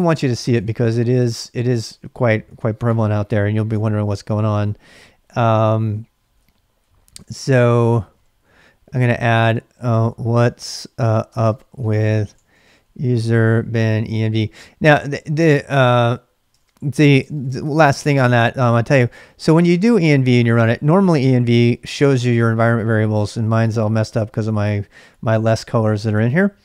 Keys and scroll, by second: 0.0-0.9 typing, 1.7 ctrl+a, 1.9 ctrl+a, 2.4 ctrl+a, 2.8-14.6 typing, 16.5-17.7 typing, 17.9 ctrl+a, 19.2-21.9 typing, 25.0-26.3 typing.